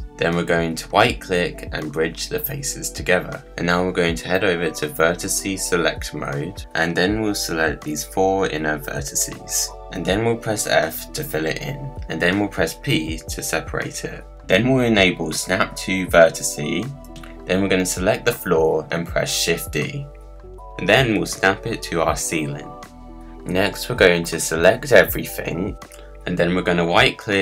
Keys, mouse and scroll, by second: 0.0-1.0 middle drag, 1.0-3.3 right drag, 3.3-4.3 middle drag, 4.3 scroll up 1, 4.4-6.6 middle drag, 6.6 click, 6.9 middle click, 7.5 click, 7.7 middle click, 8.3 shift+click, 8.9 shift+click, 9.7 shift+click, 10.8 f, 12.1 p, 13.6 middle click, 14.6 Tab, 14.9 click, 15.8 click, 16.3-17.5 drag, 18.1 click, 19.4 shift+d, 21.6 g, 23.4-24.5 middle drag, 24.5 scroll down 1, 24.8 scroll up 1, 25.2-26.2 drag, 27.1 right click.